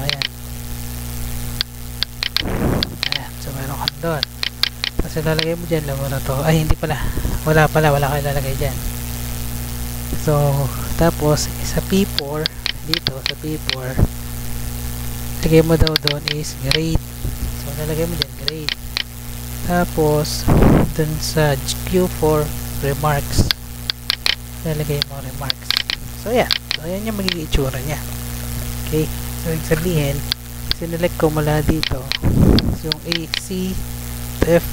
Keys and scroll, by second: 5.1 ctrl+v, 5.7 Tab, 8.3 ctrl+z, 9.1 Tab, 12.0 Tab, 13.8 Tab, 16.5 ctrl+c, 17.1 Tab, 17.6 F2, 18.0 ctrl+v, 19.5 Tab, 21.7 Tab, 23.2 Tab, 24.3 ctrl+c, 25.0 Tab, 25.9 ctrl+v.